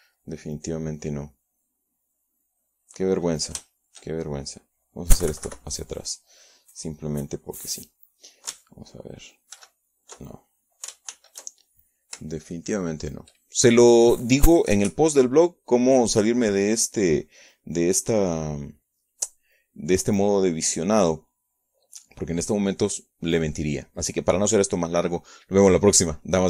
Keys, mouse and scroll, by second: 1.3 KP_Subtract, 1.9-3.4 drag, 5.7 ctrl+shift+b, 7.2 alt+shift+b, 8.4-9.5 shift+drag.